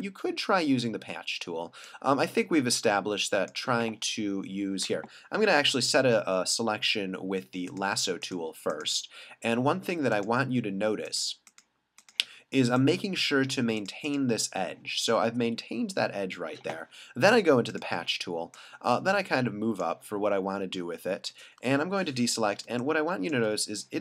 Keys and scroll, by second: 5.0 l, 21.8 super+d, 22.6 space.